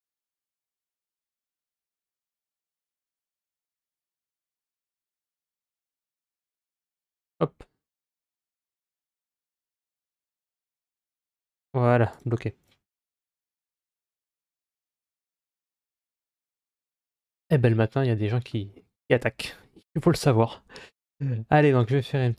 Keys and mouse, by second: 17.7 middle click, 18.6-19.4 middle drag, 22.0 Tab.